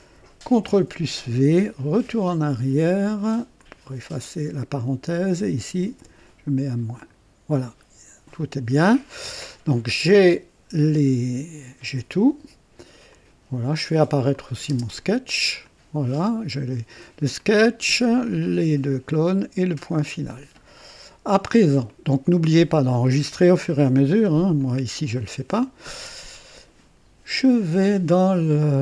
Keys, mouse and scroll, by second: 0.4 ctrl+v, 1.9 BackSpace, 3.6-5.3 drag, 6.0 -, 6.9 click, 10.1-11.8 drag, 13.1 click, 14.3 click, 14.7 space, 15.6 click, 17.4-18.3 drag, 21.9-22.6 drag, 24.6-25.8 drag, 26.0 click.